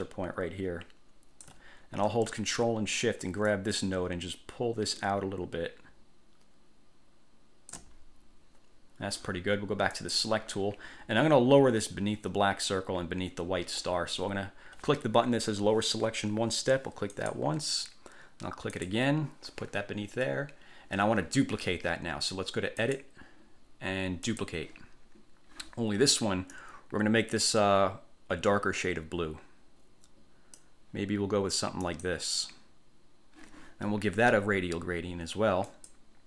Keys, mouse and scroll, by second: 3.6-8.1 ctrl+shift+drag, 10.1 click, 17.3 click, 19.0 click, 23.0 click, 24.4 click, 26.7-31.0 drag, 32.0 click, 35.8 click.